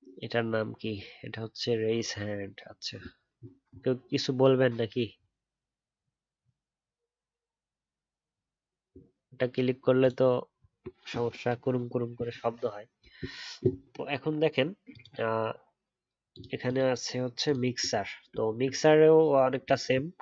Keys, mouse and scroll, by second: 18.4 alt+scroll up 1.